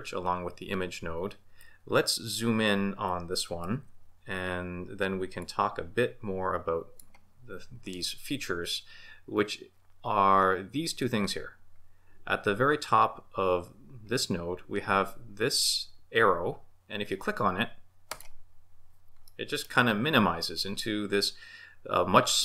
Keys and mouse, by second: 3.6 shift+b, 18.1 click, 19.2-19.7 middle drag.